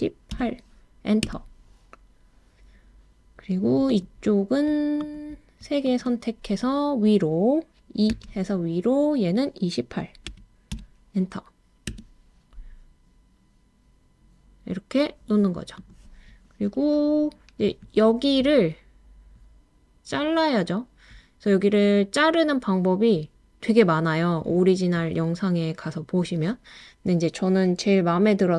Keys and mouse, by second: 0.3 8, 1.2 Return, 5.1 shift+click, 5.8 shift+click, 8.1 e, 10.3 2, 10.7 8, 11.9 Return, 15.8 click.